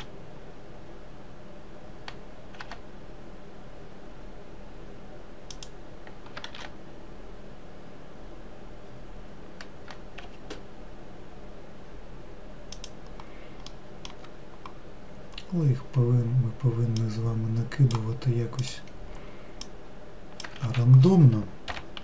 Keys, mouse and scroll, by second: 0.3 shift+d, 7.0 shift+d, 14.2-17.3 middle drag, 17.5 click, 19.1 click, 20.1 click, 21.1 ctrl+z.